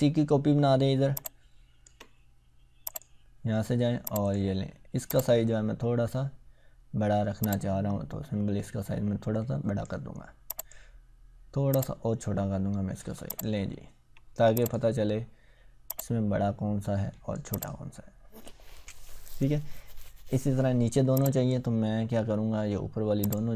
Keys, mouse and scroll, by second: 1.1-1.9 ctrl+drag, 7.5-10.0 drag, 13.8 ctrl+scroll down 1, 14.5-17.9 drag, 18.2-19.2 scroll down 1, 21.2 click.